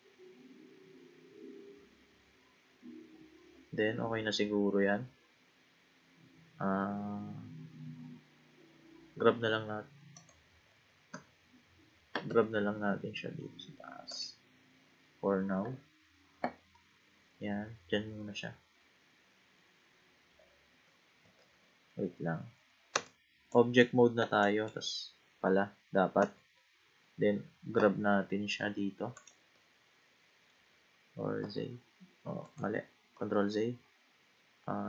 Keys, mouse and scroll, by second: 0.9-1.8 scroll down 3, 1.8-2.9 scroll up 3, 2.9-3.3 scroll up 1, 3.3-6.4 scroll down 3, 6.8-7.7 scroll down 5, 7.7-8.2 scroll down 3, 8.8-9.2 scroll down 1, 9.2 g, 11.1 a, 12.9 g, 16.7-19.8 middle drag, 21.4 ctrl+z, 22.9 Tab, 23.5 click, 24.4 click, 26.2 a, 27.7 g, 29.6-31.4 middle drag, 31.4 z, 33.3 ctrl+z.